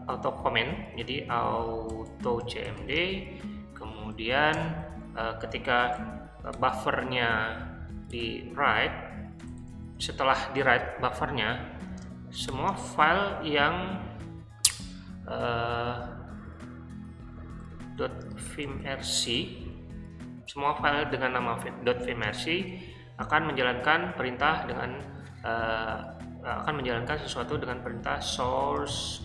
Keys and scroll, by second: 1.1-4.5 typing, 5.9-10.4 typing, 11.9 space, 12.5 *, 17.3-19.7 typing, 22.2 space, 27.5-29.2 typing.